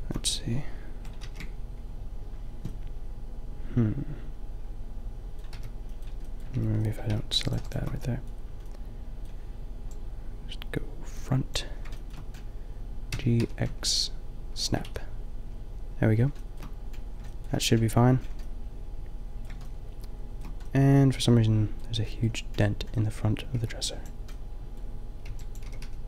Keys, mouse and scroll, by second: 1.2 ctrl+z, 5.6 b, 6.6 b, 7.1 b, 7.5-9.6 middle drag, 12.0 shift+middle click, 13.1 shift+g, 13.8 middle click, 14.8 a, 19.0 middle click, 21.9 middle click, 23.6 b, 25.3 b, 25.7 g.